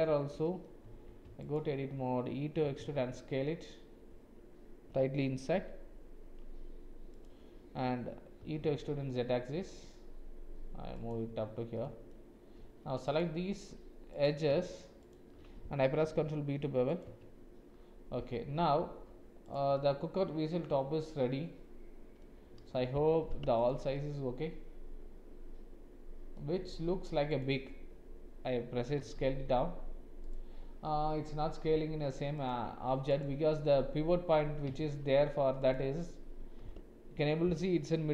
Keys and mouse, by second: 0.4 middle click, 0.8 Tab, 2.6 e, 8.4 e, 11.7 click, 15.0 alt+shift+click, 16.0 ctrl+b, 17.1 Tab, 19.4 click, 19.7-22.2 middle drag, 23.1 alt+h, 23.6 click, 23.9-26.4 middle drag, 27.3-29.0 drag, 29.0 s, 34.8 shift+z, 36.6 g.